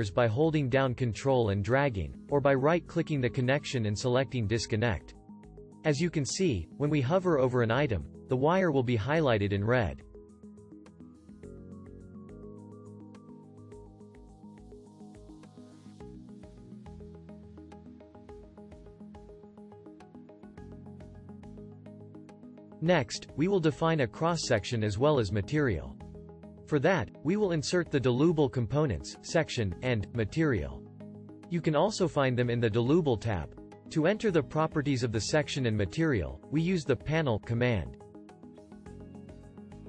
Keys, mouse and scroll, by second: 0.7 ctrl+click, 3.4 right click, 14.5-16.8 shift+drag, 18.8-20.9 drag.